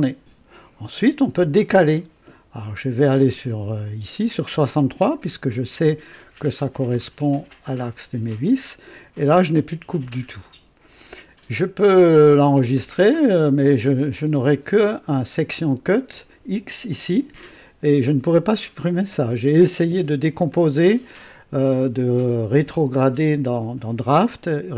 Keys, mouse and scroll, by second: 3.2 click, 5.0 KP_6, 5.4 KP_3, 6.9 KP_Enter, 13.1 click, 13.6 scroll down 1.